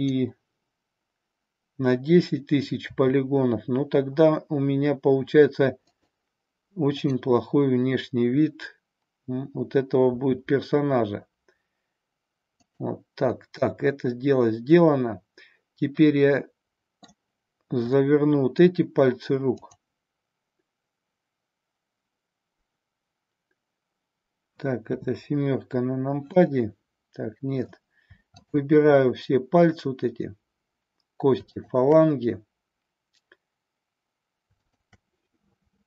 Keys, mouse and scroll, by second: 3.0 r, 6.0 click, 7.0-9.4 drag, 10.3 r, 12.8 click, 13.4-17.2 middle drag, 18.0-18.6 middle drag, 19.6 click, 24.8 KP_7, 26.2-27.9 middle drag, 28.4-31.0 shift+drag, 31.5-34.0 shift+drag, 34.6 shift+click.